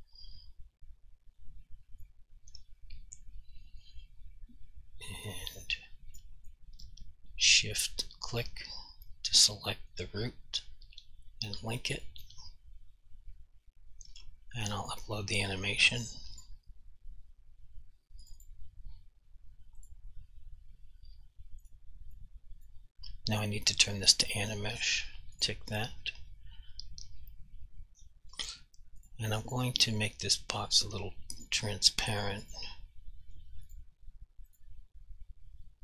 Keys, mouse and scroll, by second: 2.2 alt+click, 6.7 alt+click, 7.8 shift+click, 12.1 click, 14.9 click, 18.5 double click, 19.9 click, 22.3 click, 24.1 click, 29.1 click, 29.6 double click, 31.5 click.